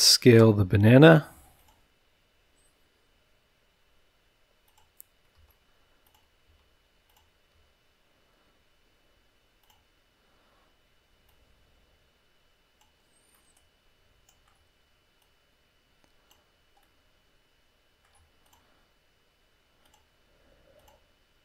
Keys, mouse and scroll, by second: 1.5 click, 4.6 click, 5.4 s, 6.0 click, 6.4 s, 7.1 click, 7.5 s, 9.6 click, 11.2-13.0 drag, 13.3-14.3 middle drag, 14.3-14.6 drag, 15.2-16.5 drag, 16.8-18.2 middle drag, 18.4 click, 19.8 click, 20.7 click.